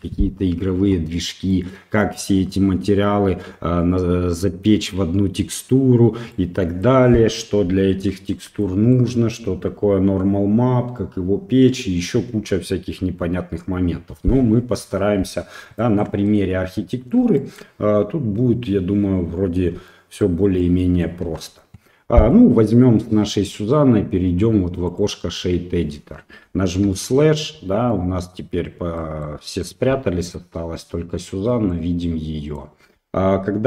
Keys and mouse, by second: 1.5 click, 6.4 middle click, 8.6 shift+middle click, 11.0-12.0 middle drag, 15.8 shift+middle click, 16.3 middle click, 17.4 shift+middle click, 19.9 shift+middle click, 20.6 middle click, 21.3 Tab, 22.3 click.